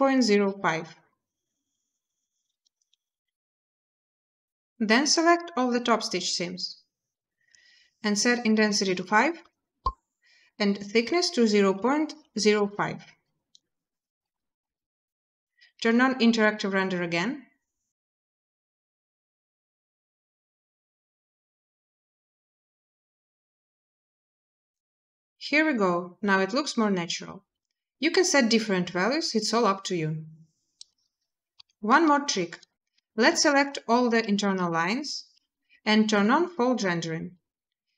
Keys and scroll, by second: 0.1 Return, 9.0 typing, 11.6-12.4 typing, 14.4 typing, 31.3 z.